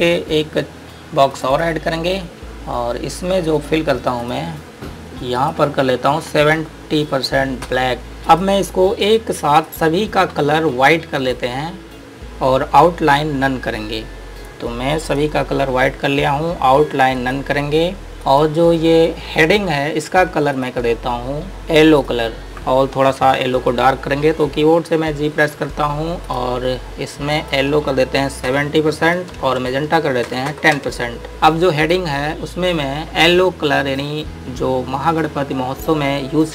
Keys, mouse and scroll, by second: 1.5 click, 6.5 KP_7, 6.8 KP_0, 8.0 KP_Enter, 8.0-8.5 scroll down 1, 8.5 click, 15.4 click, 19.5 scroll up 1, 20.8 click, 25.7 g, 26.5 click, 28.5 KP_7, 30.0 Tab, 30.6 KP_1, 30.8 Tab, 31.3 click.